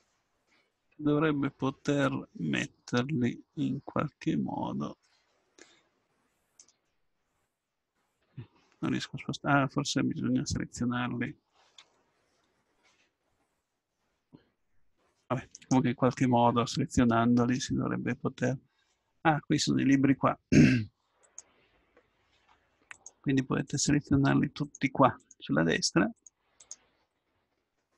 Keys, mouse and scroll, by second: 7.5-9.6 drag, 11.8 l, 15.6-17.5 right drag, 22.8-27.9 drag.